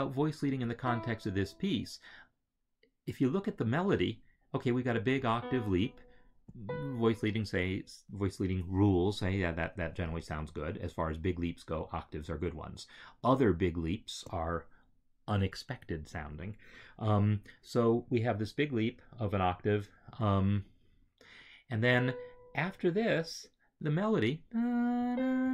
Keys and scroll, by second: 21.8 Right, 24.9 Right.